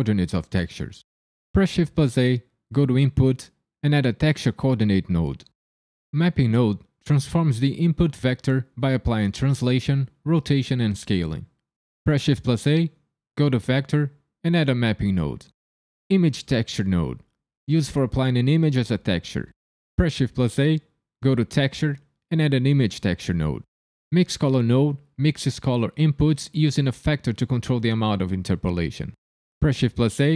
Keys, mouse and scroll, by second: 1.5 shift+a, 7.5 click, 12.0 shift+a, 17.2 click, 20.1 shift+a, 25.2 click, 29.6 shift+a.